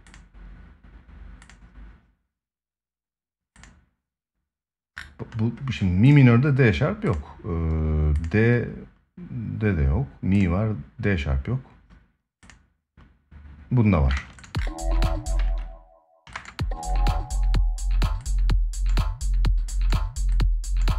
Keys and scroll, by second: 13.9 space, 14.8 space, 15.2 ctrl+s, 16.0 space.